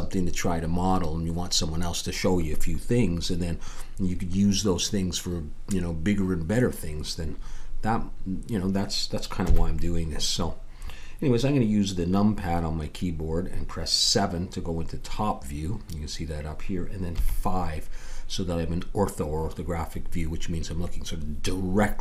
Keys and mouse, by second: 9.4 KP_7, 17.1 KP_5.